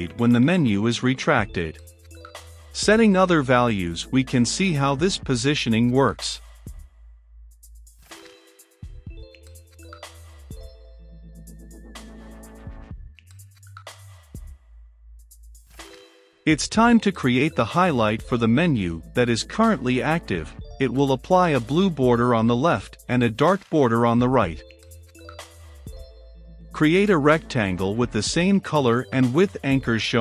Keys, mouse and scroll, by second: 19.9-21.9 drag, 21.9 Return, 24.3 click, 24.4 shift+r, 24.5 e, 24.6 c, 24.7 t, 25.2 Down, 25.5 Return, 25.9 shift+], 26.0 Return, 27.0-28.1 typing, 27.5 Return, 27.7 F12, 28.3 Return, 29.1-30.2 typing.